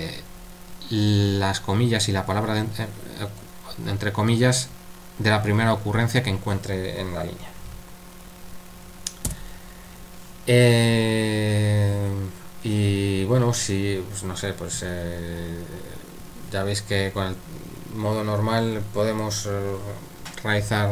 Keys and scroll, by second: 9.3 u.